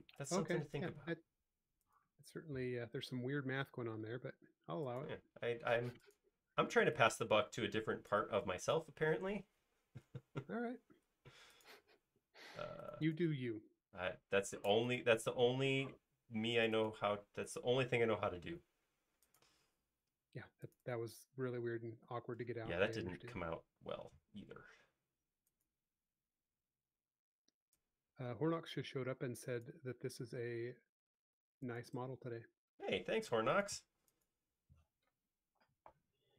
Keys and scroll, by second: 0.1 super+z, 5.6 typing, 7.4 typing, 10.7 a, 18.2 super+z, 21.9 space, 27.0 s, 30.7 m, 34.3-35.2 typing.